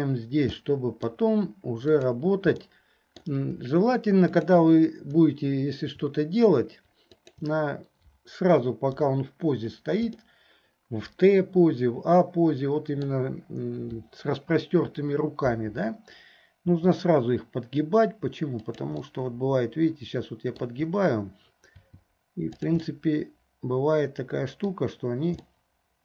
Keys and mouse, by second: 0.8 middle click, 2.1 click, 2.8 middle click, 4.3 shift+middle click, 7.2 shift+middle click, 9.0 KP_3, 10.3-13.3 middle drag, 16.7 r, 19.2-20.8 drag, 23.1-24.9 drag, 25.6-26.0 drag.